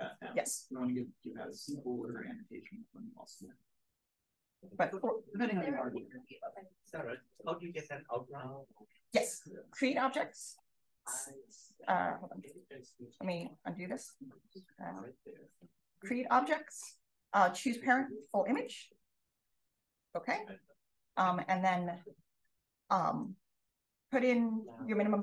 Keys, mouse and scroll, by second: 1.5 click, 1.9 click, 3.8-4.2 drag, 4.5-5.2 scroll up 1, 5.0 click, 10.4 click, 12.4 click, 13.2 click, 13.8 click, 14.5 click, 14.7-16.1 drag, 17.4 click, 18.5 click, 20.0 click.